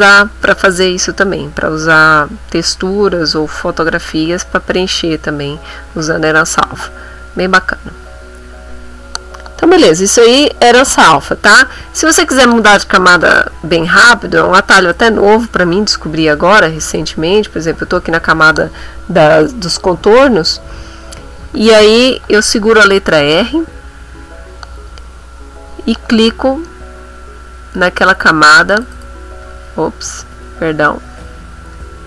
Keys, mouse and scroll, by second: 7.5 click, 8.4 middle click, 11.9 middle click, 14.9 click, 16.9 click, 22.8 r, 26.2 click, 28.0 click, 28.7 click, 30.1 ctrl+z, 31.8 r.